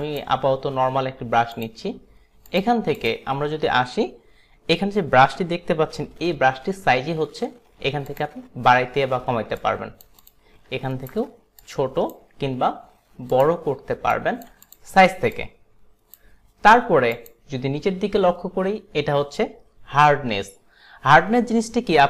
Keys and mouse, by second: 0.1 click, 1.6 click, 2.5 click, 8.2 click, 9.6 click, 10.3 click, 11.0 alt+right click, 11.7 click, 13.4 click, 14.2 click, 14.7 click, 15.5 click, 17.2 click.